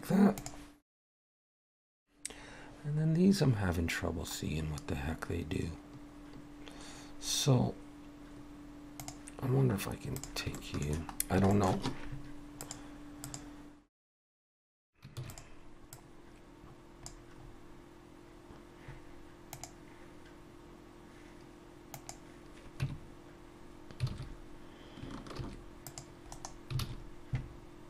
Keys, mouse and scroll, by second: 10.2 click, 10.6 shift+middle click, 11.2-11.5 scroll down 2, 11.5 shift+middle click, 12.6 click, 15.2 shift+d, 15.9 click, 17.4-18.0 scroll up 1, 18.1 scroll up 2, 22.8 Tab, 24.1 alt+a, 25.4 ctrl+r, 26.8 alt+a, 27.4 scroll up 1.